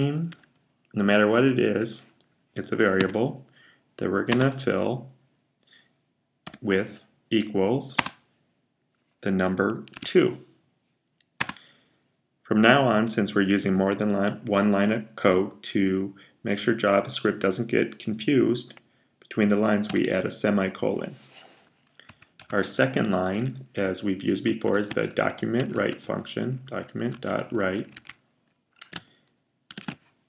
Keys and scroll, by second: 0.0-1.5 typing, 2.6-3.4 typing, 6.3 typing, 9.8 typing, 19.7 typing, 24.1-28.3 typing, 29.5 typing.